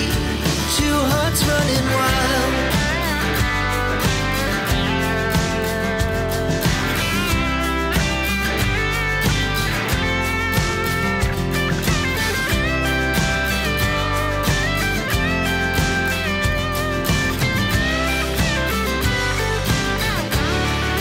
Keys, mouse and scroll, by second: 0.0 click, 2.2 click, 3.1 click, 4.3 click, 6.5 click, 7.5 click, 8.5 click, 9.9 click, 11.5 click, 12.3 click, 13.4 click, 15.5 click, 17.9 click, 19.2 click.